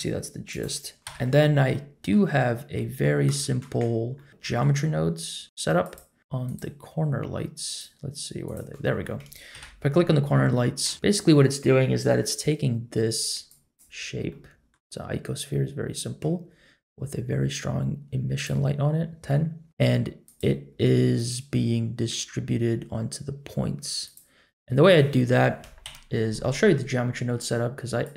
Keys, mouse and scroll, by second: 1.0 KP_Decimal, 1.7 scroll down 1, 1.7-2.1 middle drag, 2.4-2.7 scroll down 2, 2.7 middle drag, 3.4 shift+middle drag, 3.8-4.1 scroll up 2, 4.1 middle drag, 4.3-5.4 scroll down 3, 4.4 middle click, 5.8 click, 6.4 click, 7.6 click, 8.4 click, 9.5 KP_Decimal, 10.5-10.9 middle drag, 12.5-12.9 scroll down 2, 13.5-13.8 drag, 14.0 scroll up 1, 14.3-14.7 middle drag, 14.9-15.4 scroll up 1, 15.4-16.2 middle drag, 18.3 click, 19.2 middle click, 19.2 scroll up 2, 20.2 click, 21.1 click, 24.0 click, 25.8 KP_Decimal, 28.0 click.